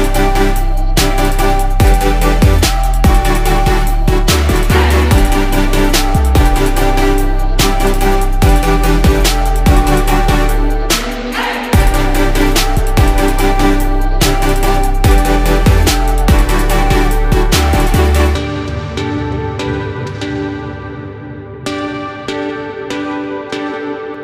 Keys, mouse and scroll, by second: 6.9 ctrl+shift+t.